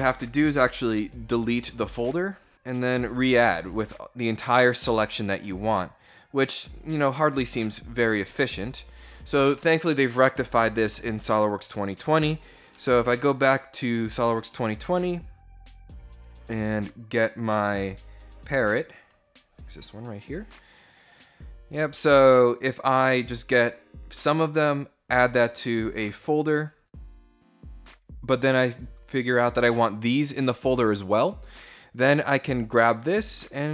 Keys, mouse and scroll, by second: 1.5 Return, 3.3 right click, 6.2 click, 8.1 click, 10.8 click, 12.6 alt+Tab, 18.5 click, 22.2 click, 25.1 click, 26.5 click, 31.7-33.4 drag.